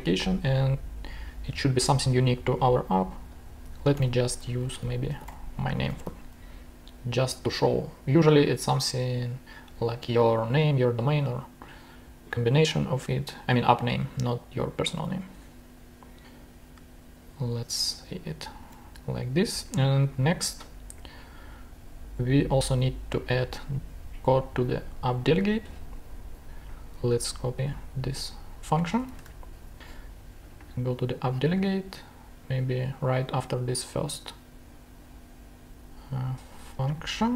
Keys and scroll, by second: 3.9-6.5 typing, 15.2 Return, 18.6 super+Tab, 28.9 super+c, 29.1 super+Tab.